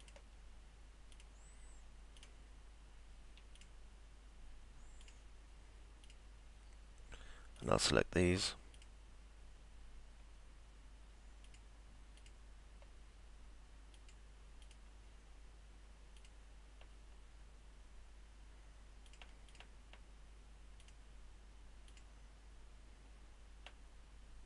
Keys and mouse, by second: 0.0 ctrl+click, 1.2 ctrl+click, 2.2 ctrl+click, 3.6 ctrl+click, 5.0 ctrl+click, 6.3 ctrl+click, 7.6 ctrl+click, 8.8 ctrl+click, 11.5 ctrl+click, 12.2 ctrl+click, 14.0 ctrl+click, 14.6 ctrl+click, 16.2 ctrl+click, 19.1 click, 20.8 ctrl+click, 21.9 ctrl+click.